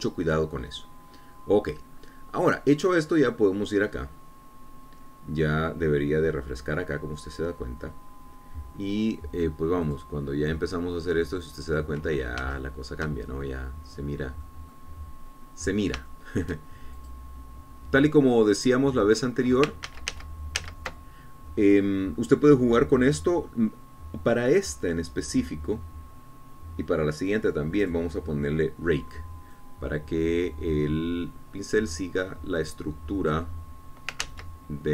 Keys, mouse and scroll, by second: 4.3 click, 11.0 click, 12.2 scroll up 1, 13.3 shift+middle click, 13.7 shift+click, 14.5-14.9 shift+scroll up 1, 15.1 scroll down 2, 15.6 middle click, 16.4 scroll up 1, 16.9 scroll down 1, 17.2 shift+click, 18.1 shift+click, 19.0-19.4 scroll down 1, 19.8 click, 21.0 ctrl+z, 29.0 click, 30.7-34.7 drag.